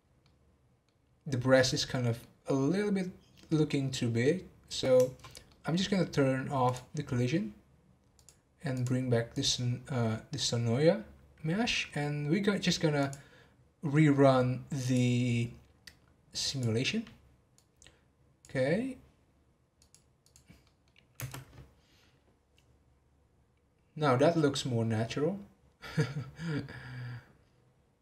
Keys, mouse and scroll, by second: 5.5-6.8 middle drag, 6.8 click, 8.1 click, 8.7 click, 9.3 click, 13.0 click, 14.8 click, 16.5 click, 17.9-19.9 drag, 20.2 click, 20.6 middle click, 21.2 space.